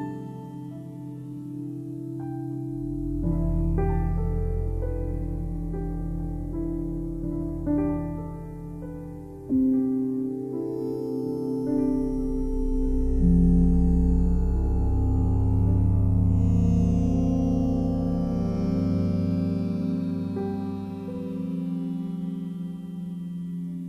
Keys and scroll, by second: 6.3 x, 11.6 space, 19.5 space, 21.6 [.